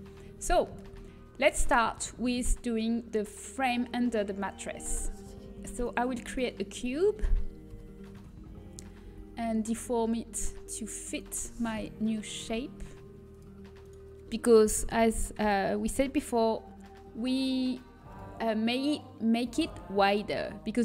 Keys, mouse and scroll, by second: 1.6 shift+a, 7.6 z, 8.1 s, 13.3 Tab, 15.1 g.